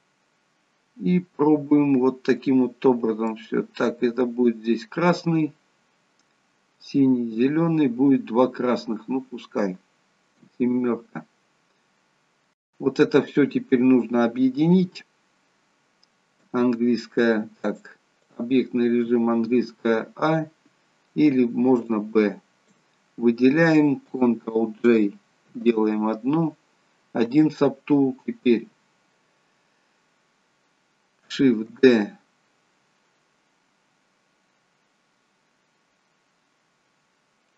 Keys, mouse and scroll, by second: 3.5 middle click, 10.5 KP_7, 16.3 a, 17.6 click, 19.0 a, 21.2 n, 21.9 click, 25.5 ctrl+j, 28.4 n, 31.7 shift+d.